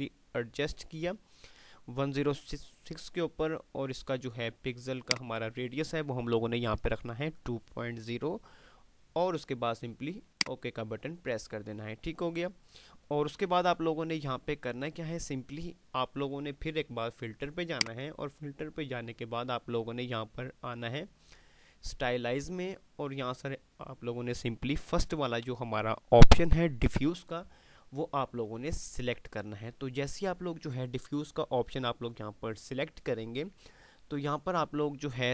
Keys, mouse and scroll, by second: 13.9 F5, 18.0 click, 28.2 click.